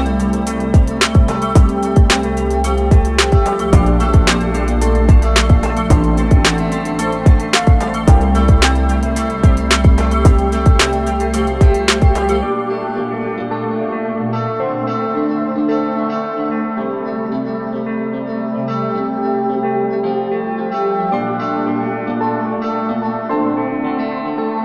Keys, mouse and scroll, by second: 0.7-1.8 alt+scroll down 4, 2.5 click, 5.0 scroll up 1, 6.2 click, 6.9 scroll up 1, 8.2 click, 16.4 ctrl+click, 17.3 ctrl+click, 18.4 ctrl+click, 20.6 click, 22.0 ctrl+click.